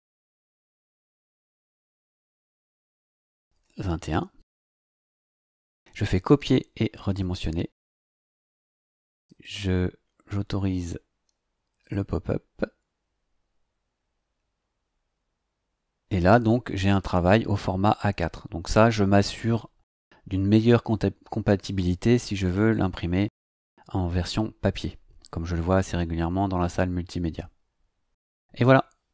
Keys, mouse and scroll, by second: 0.2 click, 3.4 KP_2, 3.5 KP_1, 7.1 click, 9.2 click, 11.7 click.